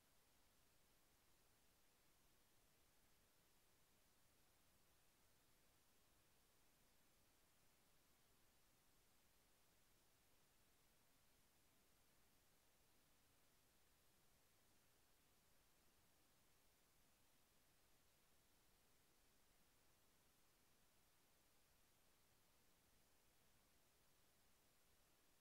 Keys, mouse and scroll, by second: 9.1 click, 11.1 click, 14.1 ctrl+click, 17.1 ctrl+click, 20.4 KP_Enter.